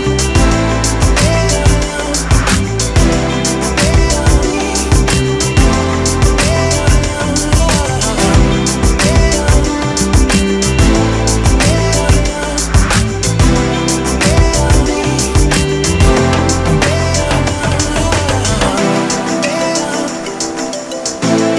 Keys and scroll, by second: 4.0-6.5 typing, 6.6 Return, 8.2 -, 12.2 4.